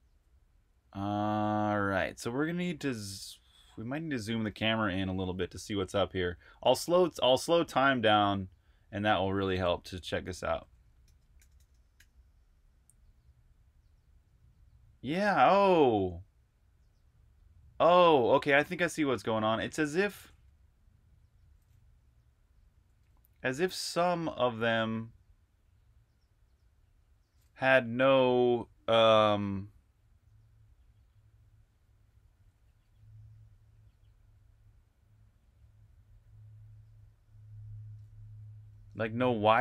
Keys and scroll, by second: 4.4 super+r, 4.7-5.8 typing, 4.9 super+h, 10.1-11.8 typing, 22.2-26.3 typing, 28.4-29.1 typing, 38.6 super+q.